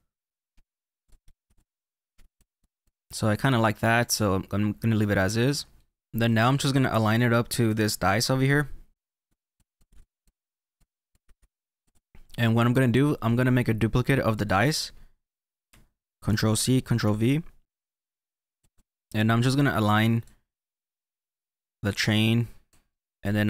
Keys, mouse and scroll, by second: 0.8 click, 1.1 click, 1.2 scroll up 1, 1.3 shift+middle click, 1.5 click, 2.6 click, 2.9 middle click, 3.9-5.1 middle drag, 6.0-7.6 drag, 9.3 click, 9.9 ctrl+z, 10.4 click, 10.9 click, 11.2 scroll down 2, 11.3 shift+middle click, 11.5 click, 14.3 click, 16.3 ctrl+c, 17.1 ctrl+v, 17.9 click, 18.7 click, 20.1 click, 22.8 middle click, 23.0 click.